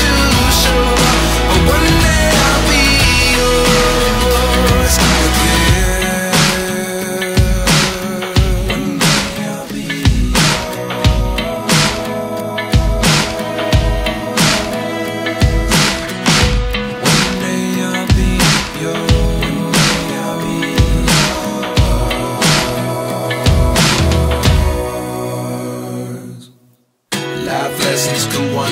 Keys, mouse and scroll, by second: 14.1-14.7 typing, 18.2 typing, 20.4 ctrl+t, 27.0 Return.